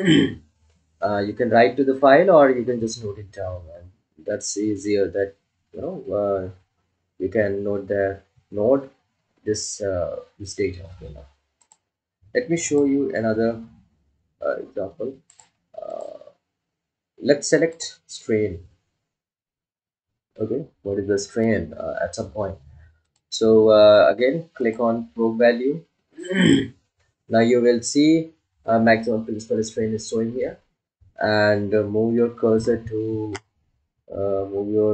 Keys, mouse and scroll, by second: 13.6 click, 19.4 click, 26.0 click.